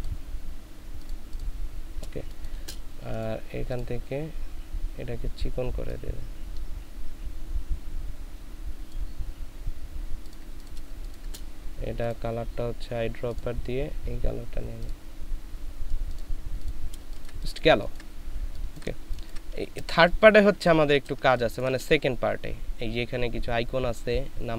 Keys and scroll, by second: 2.3 space, 10.9 ctrl+space, 17.0 ctrl+space, 20.5 space, 21.2 space.